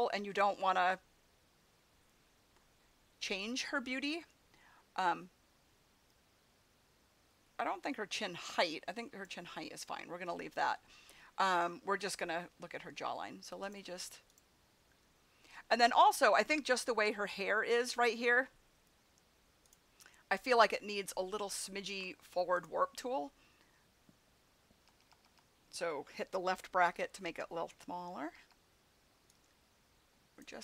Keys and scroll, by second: 24.8 [, 28.3 [.